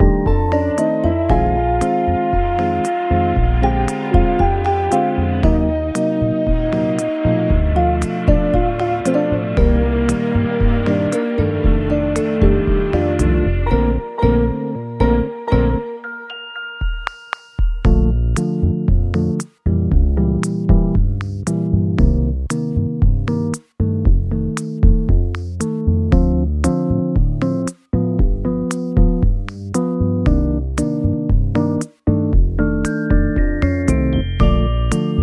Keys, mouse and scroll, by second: 0.3 middle click, 0.6 shift+middle click, 0.8 shift+scroll down 1, 1.2 middle click, 3.8 scroll up 1, 3.9 alt+scroll, 4.3 alt+middle click, 5.0 g, 5.9-6.7 scroll down 8, 9.5 e, 11.7 shift+middle click, 12.9 shift+middle click, 14.7 middle click, 15.5 m, 15.7 e, 18.5 shift+middle click, 22.1 shift+middle click, 23.1-23.4 scroll up 2, 23.8 middle click, 24.9 m, 25.0 e, 26.1 scroll down 1, 26.5 alt+z, 27.5-28.4 scroll down 3, 27.9 middle click, 29.3-29.8 scroll up 3, 34.1 double click.